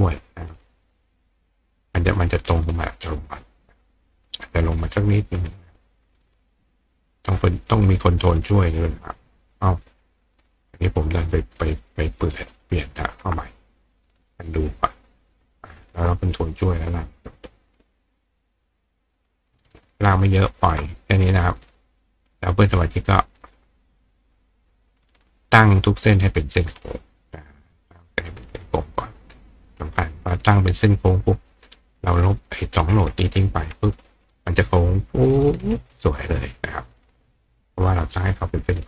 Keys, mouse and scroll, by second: 15.1 click, 16.4-20.3 ctrl+drag, 23.3-25.0 drag, 25.7-26.7 drag, 28.3-29.8 drag, 31.8 click, 32.4-33.3 drag, 36.7 click, 37.1 right click, 37.8 right click.